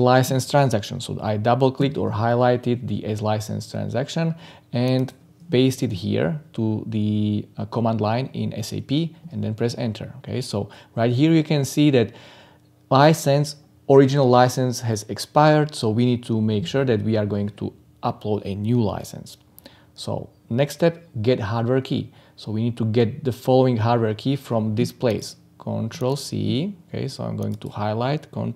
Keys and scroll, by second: 1.7 ctrl+c, 5.7 ctrl+v.